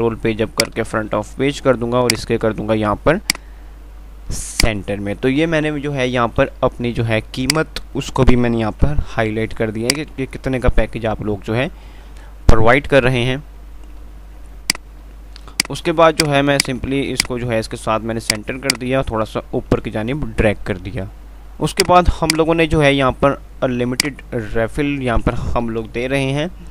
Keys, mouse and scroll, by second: 0.9 shift+click, 2.3 click, 3.8 typing, 4.8 shift+click, 6.8 ctrl+r, 7.7 click, 9.1 ctrl+g, 10.1 shift+click, 10.4 c, 14.9 click, 14.9 typing, 17.5 click, 17.7 c, 18.5 click, 20.1 F3, 22.1-26.0 drag, 26.0 shift+Page_Up.